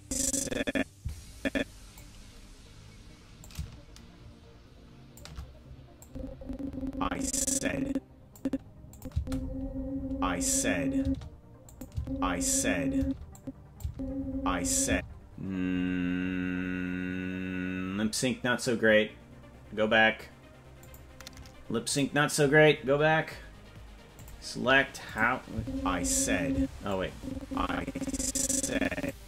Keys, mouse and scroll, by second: 3.4-5.2 shift+drag, 6.0-8.4 drag, 8.9 click, 9.1 space, 11.0 space, 11.7 click, 11.9 space, 13.0 space, 13.3 click, 13.8 space, 14.9 space, 20.8 click, 22.1-24.1 right drag, 24.1 click, 25.1 click, 25.5 space, 26.5 space, 26.9-29.1 drag.